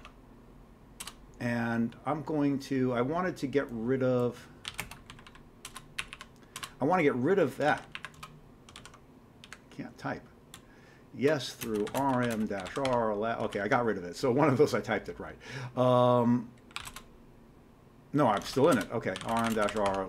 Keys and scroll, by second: 0.8-1.5 typing, 4.4-5.8 typing, 6.0 Up, 6.1 Up, 6.6 shift+Return, 7.7 ctrl+c, 7.9-8.7 typing, 8.8 ctrl+c, 9.5 Up, 10.6-13.4 typing, 13.5 ctrl+c, 16.5-20.0 typing.